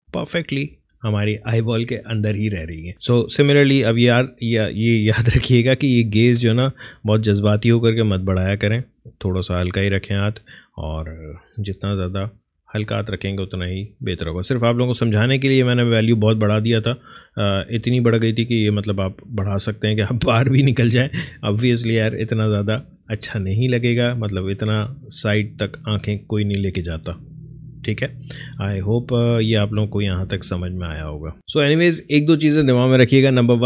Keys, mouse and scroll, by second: 0.7 Left, 5.6-11.9 drag, 11.9 Right, 13.1 Left, 15.2 click, 16.4 Left, 17.8 Right, 19.6-21.6 drag, 21.6 Left, 23.1 Right, 24.3 Left, 28.3 Up, 30.4 click.